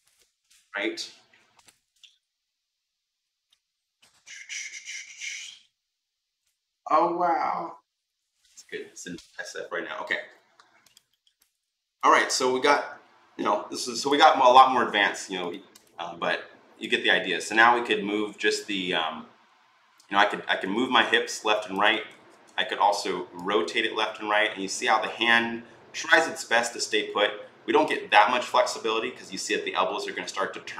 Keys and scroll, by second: 22.0 ctrl+z, 22.2 r.